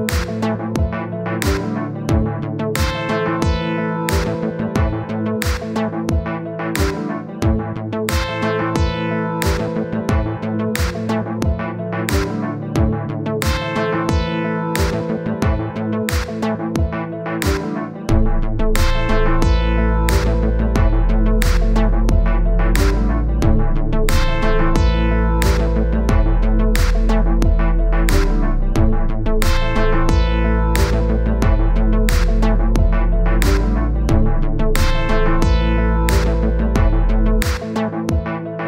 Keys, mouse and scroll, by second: 0.9 middle click, 1.4-2.7 drag, 2.7 middle click, 3.1-5.5 drag, 5.5 middle click, 6.0 click, 6.5-7.0 scroll up 1, 7.0 click, 7.2 scroll up 1, 7.4 scroll down 1, 7.7-9.2 drag, 9.2 middle click, 9.6 click, 10.3 middle click, 10.9 click, 11.7 middle click, 12.3-14.6 drag, 14.6 middle click, 15.0 click, 15.8 middle click, 16.4-17.7 drag, 17.7 middle click, 18.1 click, 18.6 middle click, 19.1-22.3 drag, 22.3 middle click, 22.9-25.9 drag, 28.2-29.4 middle drag, 31.9 KP_1, 32.4-32.7 scroll up 1, 32.9 scroll up 1, 37.2 click.